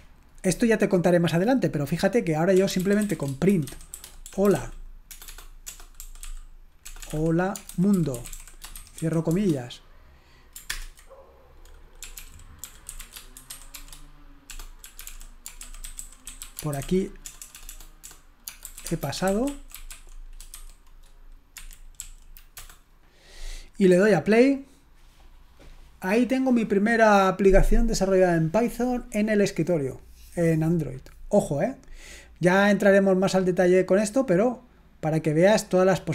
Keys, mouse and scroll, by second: 2.4-9.8 typing, 10.8 ctrl+Return, 11.9-20.8 typing, 21.6 Escape, 22.0 Up, 22.6 BackSpace, 24.3 click, 32.0 right click, 33.2 click, 34.8 right click.